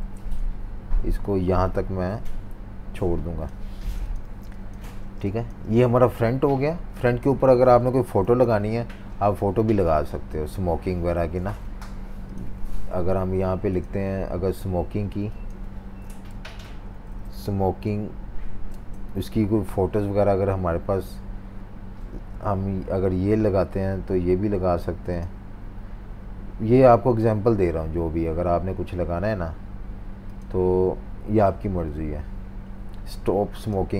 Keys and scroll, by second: 0.1 super+z, 3.6-5.1 typing, 6.7 v, 8.2 super+s, 15.8-17.9 typing, 18.7 Return.